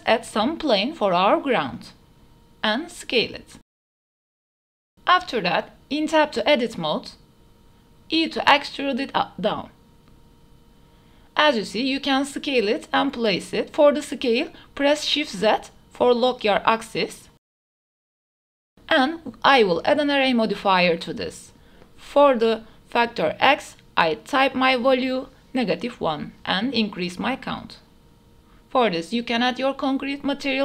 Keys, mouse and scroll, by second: 0.0 shift+a, 1.9-2.3 drag, 2.8 s, 3.9 g, 4.0 z, 5.4-5.8 drag, 6.3 middle click, 6.6 s, 7.1 middle drag, 8.2 Tab, 9.1 e, 10.8 click, 11.1 s, 11.9 s, 12.4 shift+z, 15.5-15.8 middle drag, 16.5 KP_0, 16.8 ctrl+s, 17.7 drag, 18.1 click, 18.5-19.4 drag, 21.7-23.2 drag, 24.7 click, 24.9 click, 25.2 click, 26.1 Tab, 26.1 a, 26.5 click, 27.6-29.1 drag, 28.9 e.